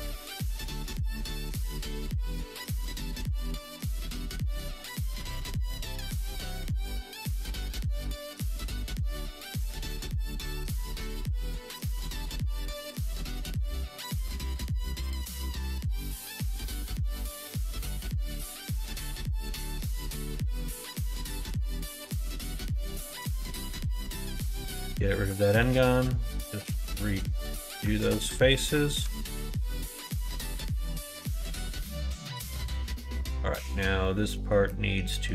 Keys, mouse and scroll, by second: 0.5 2, 0.7 click, 3.5 x, 6.4 2, 6.7 click, 6.9 middle click, 7.7-9.1 right drag, 9.1 1, 9.3 click, 10.1 g, 13.1 click, 16.2 click, 16.4 2, 16.6 click, 19.7 right click, 20.9 2, 22.9 click, 23.6 3, 23.8 click, 24.2 x, 25.6 2, 25.9 click, 26.5 shift+click, 26.8 f, 27.9 alt+click, 29.3 alt+shift+click, 30.4 ctrl+f, 31.3 click, 31.9 middle click, 32.5 middle click, 33.3 middle click, 34.0 middle click, 34.3 middle click, 34.6 middle click, 35.1 middle click.